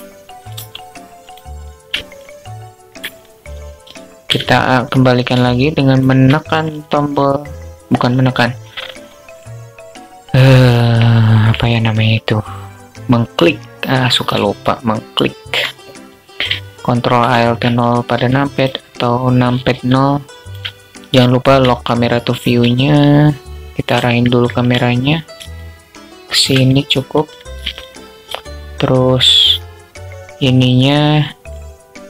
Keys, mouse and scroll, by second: 1.6 middle click, 1.6-2.3 alt+drag, 2.3 middle drag, 4.8-5.5 alt+shift+drag, 13.8-15.0 shift+drag, 16.6 ctrl+alt+KP_0, 17.5 q, 19.1 q, 21.1-21.8 alt+drag, 22.2-23.3 shift+drag, 24.1-24.7 alt+drag, 24.9-25.9 alt+shift+drag, 26.0-26.6 alt+drag, 30.9 click.